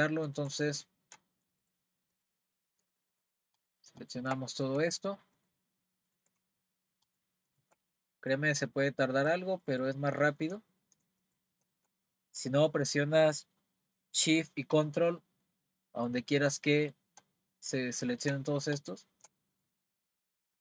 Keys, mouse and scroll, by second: 0.8-1.6 scroll up 3, 1.6 shift+click, 2.1 shift+click, 2.9 shift+click, 3.1 shift+click, 3.6 shift+click, 4.0 shift+click, 4.5-5.0 scroll down 1, 5.0 shift+click, 5.4 shift+click, 6.1 shift+click, 7.0 shift+click, 7.5 shift+click, 7.9-9.7 middle drag, 9.7 shift+click, 11.2 shift+click, 15.4-18.3 middle drag, 18.7 shift+click, 19.7-20.6 middle drag.